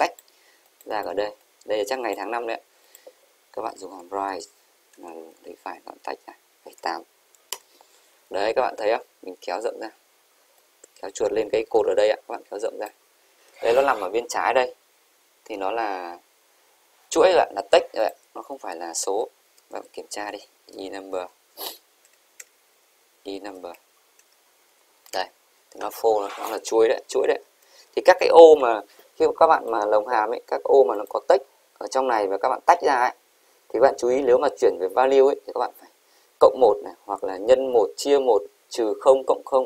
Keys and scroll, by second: 27.3 shift+Right, 28.1 Delete.